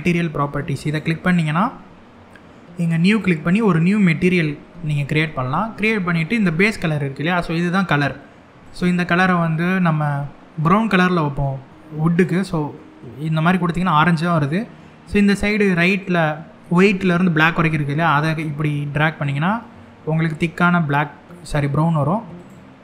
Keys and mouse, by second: 0.6 click, 2.7 click, 8.3 click.